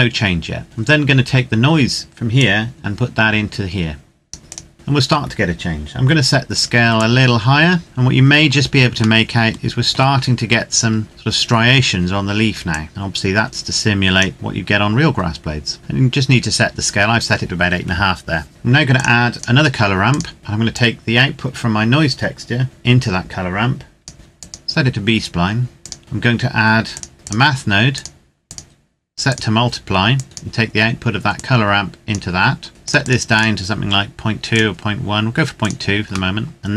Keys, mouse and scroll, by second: 2.1 click, 4.7-5.7 scroll down 2, 6.6 click, 7.8-8.7 scroll up 1, 8.9 shift+middle click, 10.6-12.4 scroll down 1, 12.4 click, 14.3-15.7 scroll down 1, 15.7 scroll up 1, 18.5 click, 26.8 click, 31.4 click, 36.2 shift+middle click, 36.6 click.